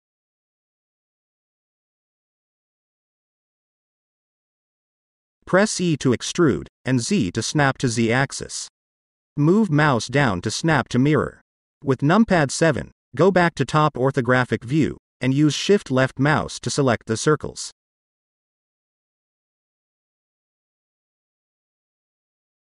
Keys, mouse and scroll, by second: 1.1-2.2 shift+drag, 2.9-3.3 scroll up 1, 3.3-4.4 middle drag, 5.1 e, 6.2 z, 8.0 click, 8.5-9.6 middle drag, 10.1 click, 11.1 KP_7, 12.9 click, 14.6 shift+click, 16.2 shift+click, 17.7-18.7 shift+drag, 19.1-20.1 scroll up 2, 20.1-22.6 middle drag.